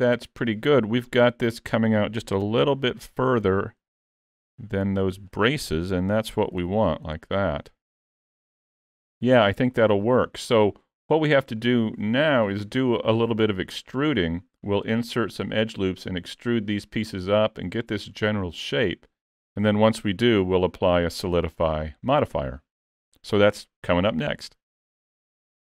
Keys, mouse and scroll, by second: 3.0 alt+click, 4.3 click, 5.8 Tab, 6.3-6.6 scroll down 2, 6.7 alt+a, 7.0 middle click, 11.3 scroll up 2, 11.6 shift+middle click, 19.7 middle click.